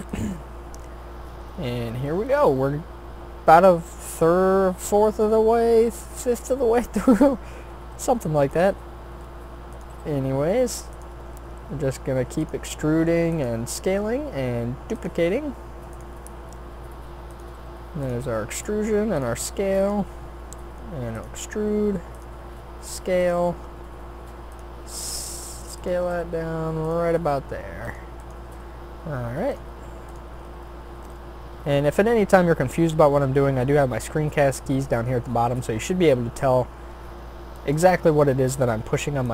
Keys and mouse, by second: 0.9 middle click, 3.8-5.2 middle drag, 7.8 shift+d, 8.7 r, 9.9 g, 11.1 e, 12.6 s, 13.6 e, 15.1 s, 16.0 e, 17.5 r, 18.3 s, 19.3 g, 20.0 e, 21.6 r, 22.4 s, 23.3 g, 24.8 s, 26.1 g, 27.9 click, 30.8-31.9 drag, 33.8-35.5 middle drag, 37.6 shift+d.